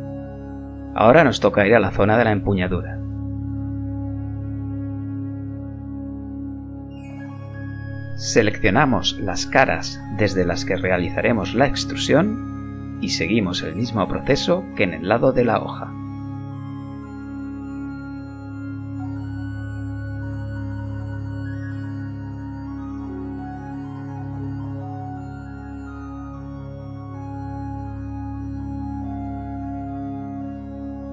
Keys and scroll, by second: 0.1 KP_1, 15.4 s, 17.3 KP_1, 18.4 e, 20.2 3, 22.6 KP_1, 24.6 e, 25.7 e, 26.6 s, 26.8 z.